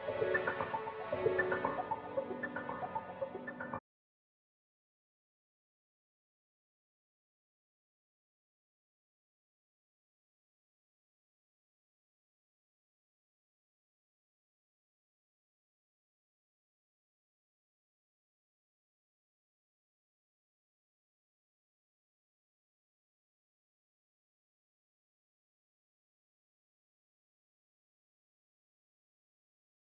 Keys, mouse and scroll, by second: 2.0 scroll down 1, 2.0-2.5 scroll up 1, 3.7-4.1 scroll down 1, 4.6 click, 5.1-5.7 scroll up 1, 7.4 typing, 8.2 Return, 9.0 click, 11.8 click, 12.6-13.3 scroll down 1, 13.7 scroll up 1, 13.9-15.1 right drag, 15.1 scroll down 1, 15.3 scroll up 1, 18.2 scroll down 1, 18.8 scroll up 1, 19.8 click, 22.8 click, 25.8 click, 26.3 scroll up 1, 26.9-28.3 drag.